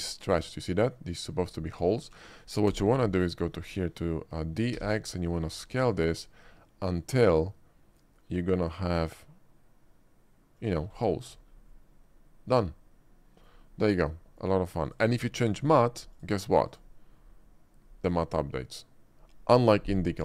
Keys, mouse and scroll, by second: 0.0 shift+middle click, 0.3 shift+click, 0.9 shift+middle click, 1.9 alt+click, 2.7 d, 3.7 click, 3.9 middle click, 4.7 x, 10.6 click, 11.3 Tab, 11.8-13.5 middle drag, 14.2 middle drag, 14.8 click, 16.2 click, 16.8 click.